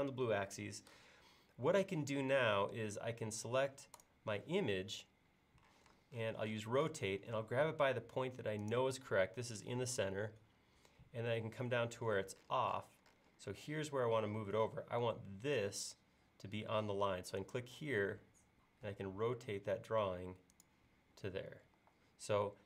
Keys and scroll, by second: 5.8 q, 21.8 e.